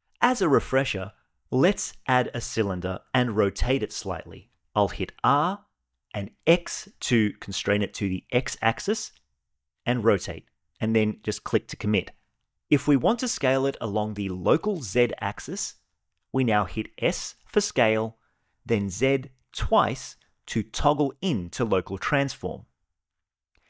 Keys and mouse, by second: 0.6 shift+a, 4.3 r, 6.2 x, 16.5 s, 17.5 z, 17.9 z.